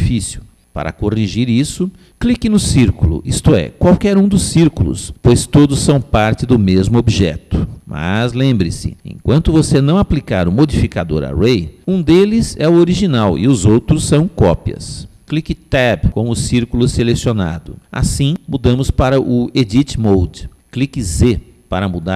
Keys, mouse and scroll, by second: 5.0 click, 16.9 Tab, 21.2 z.